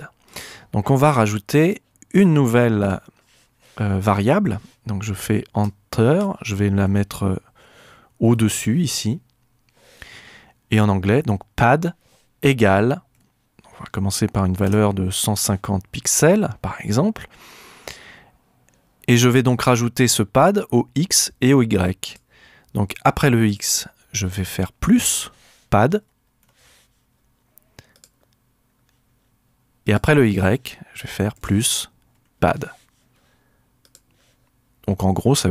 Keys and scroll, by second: 4.1 Left, 5.6 Return, 6.8 Up, 8.3 Up, 10.8-12.0 typing, 13.1-15.1 typing, 25.7-26.9 typing, 31.8-33.0 typing.